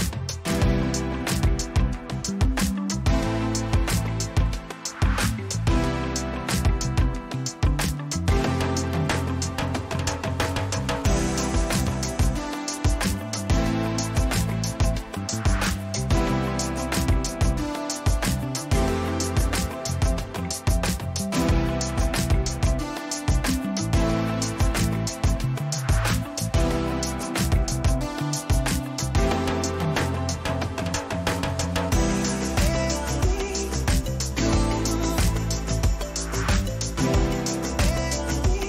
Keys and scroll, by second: 6.7 Return.